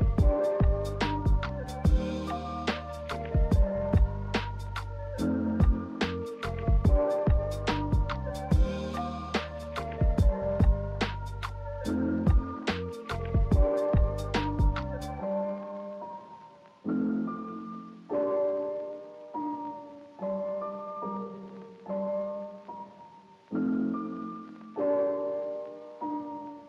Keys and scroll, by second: 3.2 v, 7.6 z.